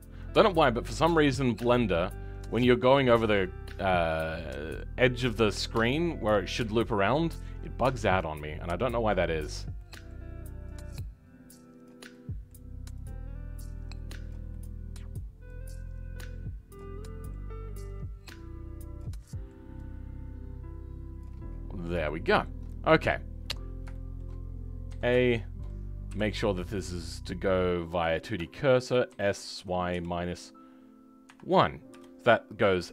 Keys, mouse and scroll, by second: 4.3-6.8 shift+middle drag, 6.8 shift+click, 7.0-9.5 shift+middle drag, 9.5 shift+click, 9.7-11.8 shift+middle drag, 11.8 shift+click, 12.0-14.2 shift+middle drag, 14.2 shift+click, 14.4-16.7 shift+middle drag, 16.7 shift+click, 16.9-18.9 shift+middle drag, 18.9 shift+click, 19.1-21.1 shift+middle drag, 21.1 shift+click, 21.4-22.0 scroll down 10, 22.0-24.8 shift+middle drag, 24.8 a.